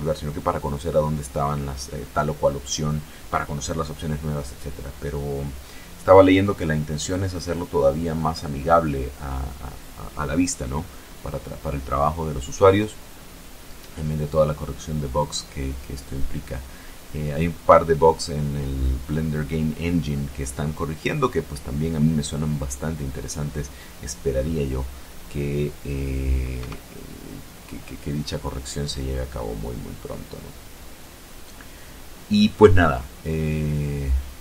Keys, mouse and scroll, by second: 25.6 KP_0.